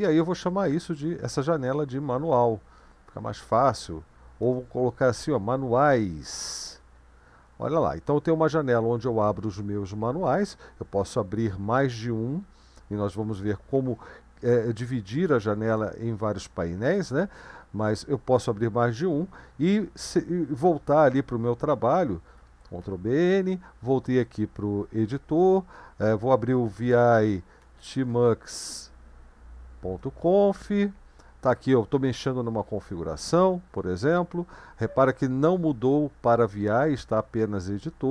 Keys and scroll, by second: 1.0-2.3 typing, 4.5-6.1 typing, 6.7 Return, 22.4 ctrl+b, 22.8 n, 26.5-28.5 typing, 30.2 Return.